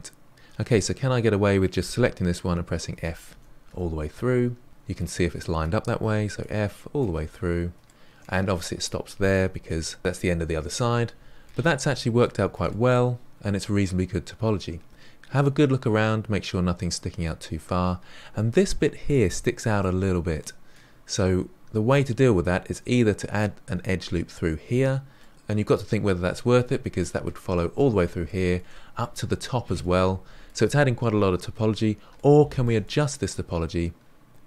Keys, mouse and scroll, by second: 0.3 click, 1.5-2.5 typing, 2.9 scroll down 2, 3.2 shift+middle click, 4.0 f, 4.2-4.6 middle drag, 4.6 f, 5.1-6.1 shift+middle drag, 6.1 ctrl+z, 6.3-7.7 middle drag, 10.8-11.7 middle drag, 11.7-12.2 scroll down 2, 12.2-15.7 shift+middle drag, 17.5-18.6 scroll up 5, 18.6-19.8 scroll up 1, 19.8-22.8 middle drag, 24.6-25.1 scroll down 1, 25.1-26.4 middle drag, 26.4-27.0 scroll down 2, 27.0-31.5 middle drag, 31.5-32.1 scroll up 5, 32.1-34.4 shift+middle drag.